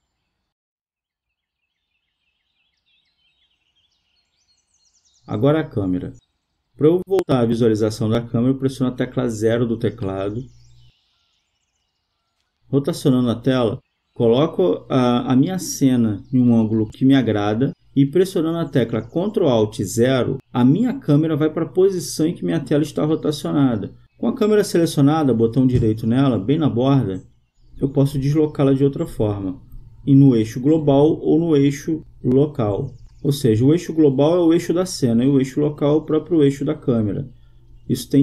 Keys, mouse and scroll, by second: 7.8 KP_0, 11.0-12.5 drag, 13.1-14.7 middle drag, 18.2 middle click, 19.9 ctrl+alt+KP_0, 23.1 click, 26.3 middle click, 28.7 middle click, 30.4-32.3 drag, 31.1 middle click, 32.3 middle click, 35.9-37.6 drag, 37.6 middle click.